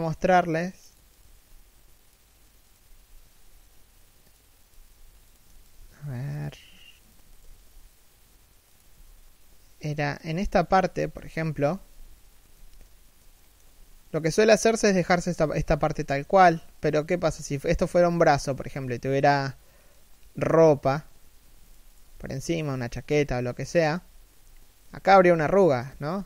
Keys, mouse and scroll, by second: 0.8 right click, 0.9 g, 2.3 right click, 2.5 g, 4.3 right click, 5.2 shift+right click, 5.4 g, 6.7 right click, 7.2 g, 8.6 a, 10.7 z, 12.0 scroll down 1, 12.2 z, 13.1 shift+middle click, 13.5-14.7 scroll up 1, 16.9 z, 18.3 z, 21.3 shift+right click, 21.8 g, 24.0-24.6 scroll up 1, 24.6 z, 25.6 z, 25.9-26.2 scroll down 1.